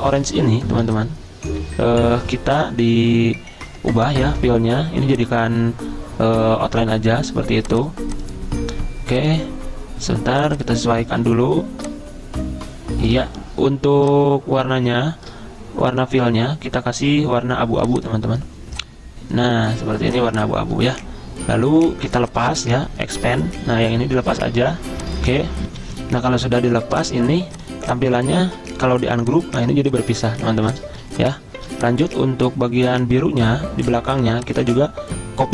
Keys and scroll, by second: 25.7 F10, 28.5 ctrl+z, 30.3 ctrl+z, 31.6 v, 34.5-35.3 typing.